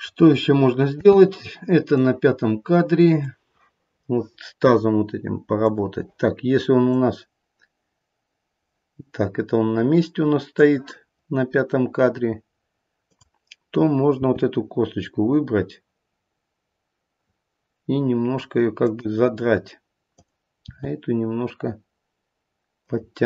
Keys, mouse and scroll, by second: 0.9 space, 1.9 click, 5.6 click, 6.9 click, 13.0 click, 14.2 r, 20.1 click, 21.2 r.